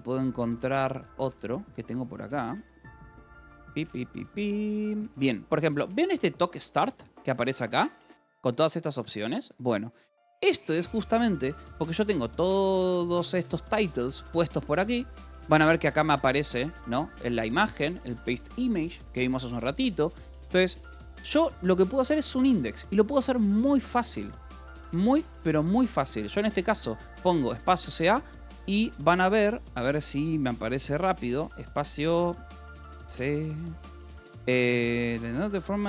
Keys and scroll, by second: 0.3-4.9 typing, 1.2 Return, 6.9 j, 8.9 Escape, 10.1-12.1 typing, 13.3 Escape, 13.5 j, 15.3 k, 16.8-21.3 typing, 18.9 Escape, 22.3-24.5 typing, 25.1 Escape, 26.2 space, 26.3 c, 26.9 a, 31.3 space, 32.2 c.